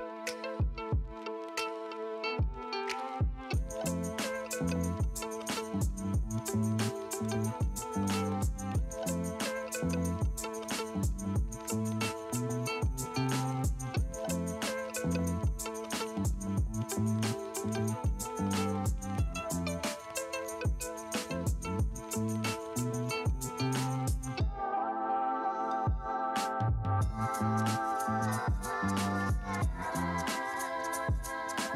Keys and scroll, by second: 1.8 ctrl+space, 2.0 ctrl+space, 2.7 space, 3.0 space, 3.8 space, 4.3 space, 9.8-13.1 typing, 14.4 space, 14.6 ctrl+Return, 14.9 ctrl+space, 15.1 ctrl+space, 28.8 Escape, 29.3 v, 29.6 ctrl+space, 29.9 ctrl+space, 30.6 space.